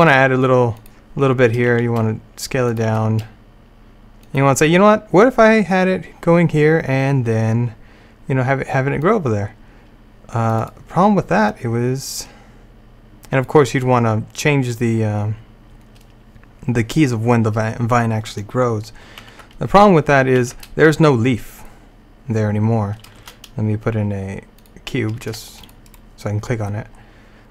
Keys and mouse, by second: 1.8 s, 3.0 g, 9.1-13.7 drag, 19.3 alt+a, 20.4 alt+a, 23.3 shift+a, 25.3 g, 26.4 click.